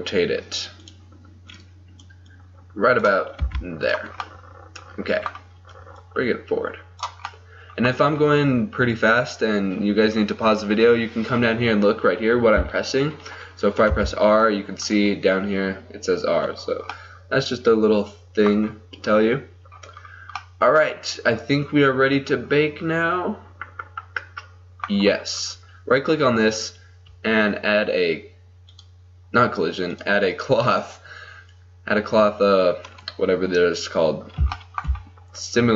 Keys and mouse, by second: 1.6-4.3 drag, 3.5 r, 4.3-6.0 middle drag, 6.0-10.9 drag, 14.0 r, 17.1-20.5 middle drag, 22.5-24.2 middle drag, 25.4-28.7 right drag, 28.7-32.1 drag, 32.1-34.8 middle drag.